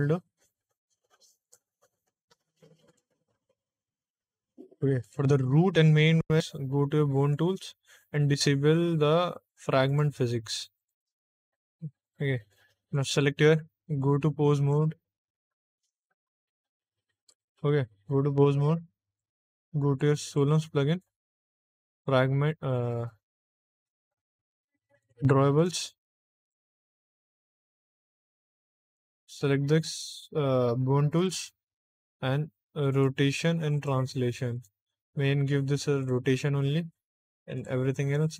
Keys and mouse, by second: 1.3 click, 1.9 click, 2.8 click, 4.9 click, 7.1 click, 9.8 click, 10.7 click, 11.9 click, 12.8 click, 14.7 ctrl+Tab, 15.8 Tab, 19.0 click, 20.2 click, 21.8 click, 24.9 click, 25.5 click, 26.3 click, 27.1 click, 28.0 click, 28.8 click, 31.1 click, 32.8 click, 33.7 click, 34.4 click, 35.9 click, 37.5 click.